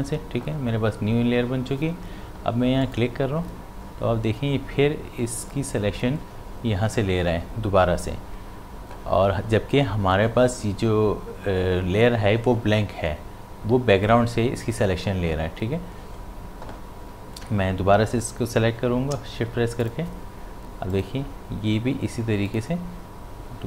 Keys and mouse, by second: 2.8 click, 19.1 shift+Num_Lock, 19.8 shift+click.